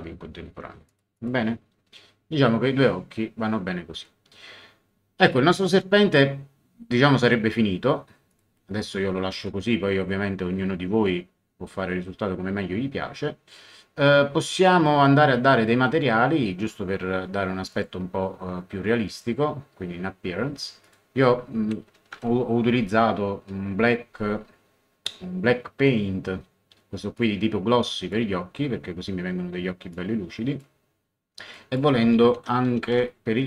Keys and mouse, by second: 0.8 click, 8.3 click, 17.7 click, 19.1 click, 20.8 click, 21.6-22.7 typing, 27.1 click, 29.9 click, 31.5 click, 32.1-33.4 typing.